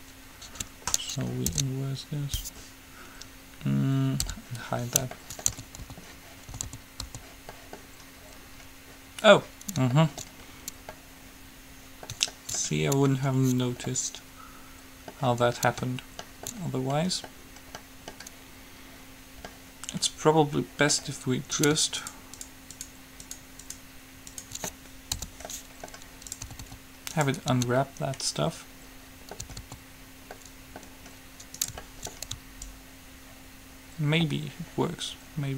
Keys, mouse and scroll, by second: 1.8 ctrl+i, 4.6 h, 5.4-7.3 middle drag, 5.8-7.3 typing, 7.8 middle click, 15.8-17.6 middle drag, 17.9 middle click, 19.7-20.7 middle drag, 20.7 click, 20.7-21.8 middle drag, 21.8-25.6 right drag, 25.4 h, 25.6 middle click, 26.7 a, 26.8 a, 28.9 right click, 29.3 middle click, 29.7 a, 30.1 a, 30.6 middle click, 31.8-33.6 right drag, 32.8-34.6 drag.